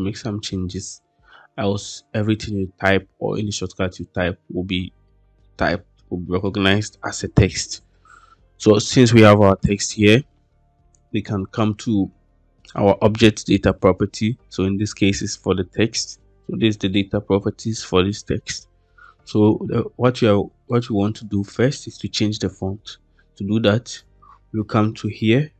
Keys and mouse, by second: 20.1 middle click.